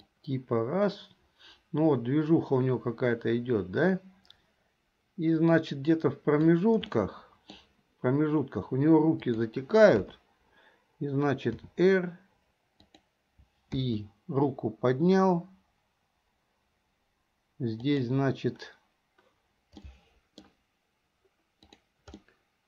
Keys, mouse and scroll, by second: 0.2-6.7 drag, 7.1-7.7 middle drag, 9.2 click, 10.1 KP_3, 11.7 r, 13.9 i, 18.0 click, 19.9 middle click, 21.7 click, 22.3 middle click.